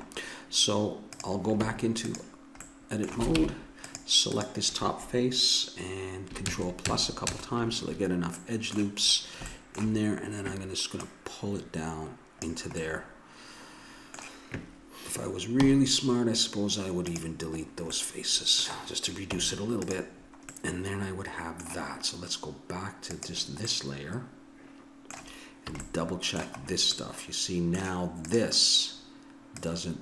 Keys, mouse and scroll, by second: 1.1 right click, 1.6 Tab, 2.7 click, 3.4 ctrl+Tab, 6.5 ctrl+KP_Add, 8.4-10.6 middle drag, 11.0-12.5 drag, 12.8 middle click, 15.6 x, 17.8-19.0 middle drag, 19.4 Tab, 21.3-22.5 drag, 23.1 click, 23.7-24.9 middle drag, 25.7 a, 28.2 right click, 28.8-30.0 drag.